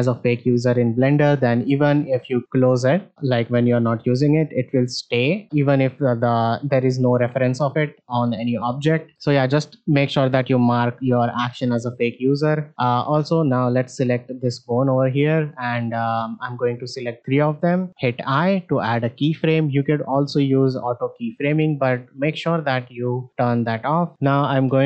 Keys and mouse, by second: 5.8 shift+middle drag, 12.5 shift+middle click, 13.7 shift+middle click, 16.6 shift+click, 21.1 click, 22.5-23.4 drag, 24.0 shift+middle click, 24.5-24.8 shift+middle drag.